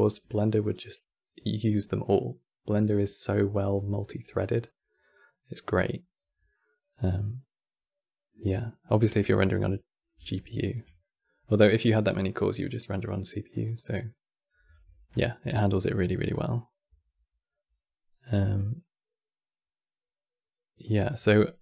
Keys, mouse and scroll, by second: 8.7-13.9 middle drag, 14.8-17.8 middle drag, 18.1-21.2 middle drag.